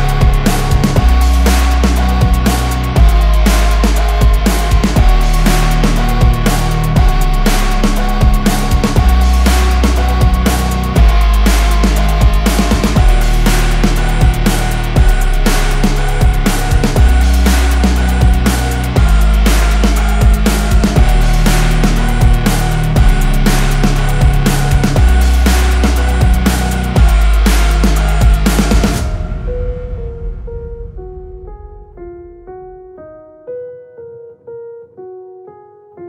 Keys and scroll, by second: 0.2 Escape, 2.3 ctrl+space, 2.9 ctrl+shift+c, 3.5 Escape, 8.0 shift+F2, 8.5 Escape, 17.1 ctrl+r, 17.7 Escape, 23.5 F3, 24.6 F2, 29.5 F5, 30.9 F3.